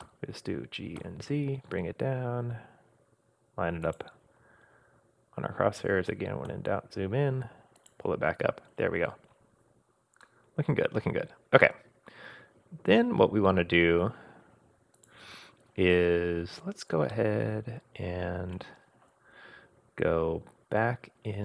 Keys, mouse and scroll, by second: 0.0 g, 4.2-5.3 scroll up 6, 6.1 g, 8.4-10.2 scroll down 2, 10.2-14.1 middle drag, 10.2 scroll down 5, 15.0 click, 17.0 scroll down 1, 17.1-18.7 middle drag.